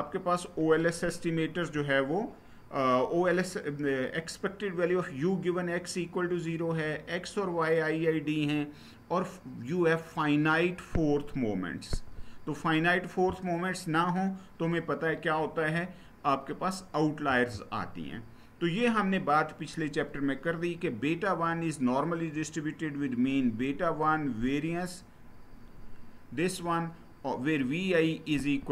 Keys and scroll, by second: 17.0 Down.